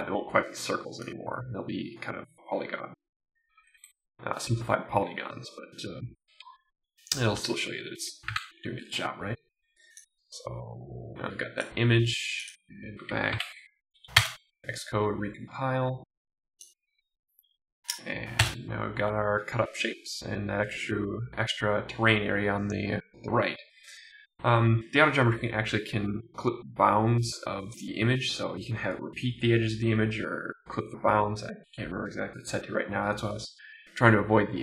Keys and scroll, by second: 8.3 super+s, 13.3 super+r, 14.3 Return, 18.5 Return.